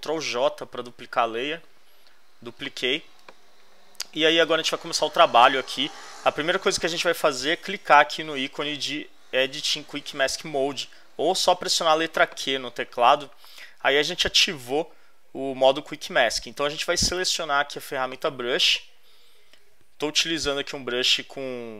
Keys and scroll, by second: 0.1 super+j, 20.4 [.